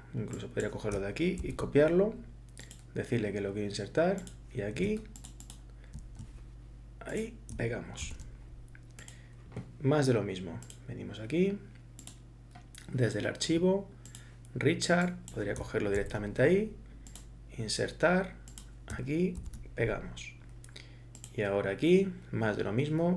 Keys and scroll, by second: 1.5 ctrl+c, 8.0 ctrl+v, 16.0 ctrl+c, 19.4 ctrl+v.